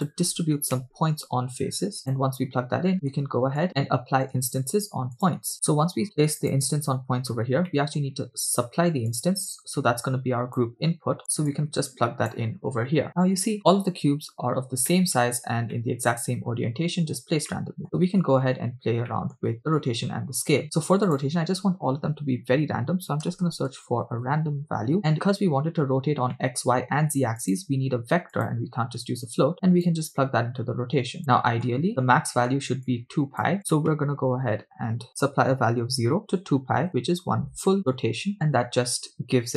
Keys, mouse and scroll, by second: 2.9 middle click, 4.0 click, 4.6 shift+a, 7.3-7.7 scroll down 2, 7.7 middle click, 9.1-10.7 drag, 11.5-12.6 drag, 14.9-15.3 shift+middle drag, 15.5 scroll up 2, 15.8-16.7 middle drag, 17.1 scroll up 2, 17.5 middle click, 19.1 middle click, 20.6 scroll up 1, 20.6 shift+a, 26.0 scroll up 1, 26.4 middle click, 27.7-29.0 drag, 30.1-31.2 drag, 31.3 middle click, 32.2 scroll up 1, 33.1 shift+click, 38.0 shift+click.